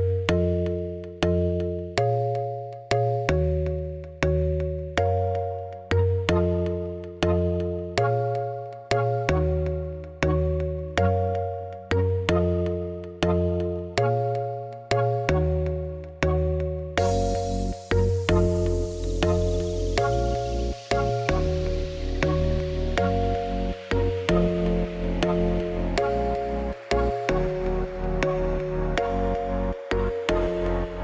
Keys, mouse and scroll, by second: 1.6 middle click, 1.8 scroll down 1, 1.9 scroll up 8, 2.0 middle click, 2.8 scroll down 1, 3.1 KP_0, 3.9 click, 7.0 click, 12.5 middle click, 12.9 scroll up 6, 13.1 click, 13.4 click, 13.6 shift+click, 13.9 shift+click, 14.1 scroll down 2, 14.2 middle click, 14.5 s, 15.1 shift+middle click, 15.5 scroll up 4, 15.6 g, 16.2 middle click, 16.3 scroll down 6, 16.5-17.5 middle drag, 17.5 click, 18.5 scroll up 6, 18.8 click, 19.4 click, 19.7 shift+middle click, 20.5 scroll down 3, 20.6 shift+middle click, 21.0 KP_0, 21.4-21.7 scroll down 1, 23.4 click, 24.2 click, 29.6 shift+s, 30.0-30.5 scroll down 1, 30.5-31.0 scroll up 1.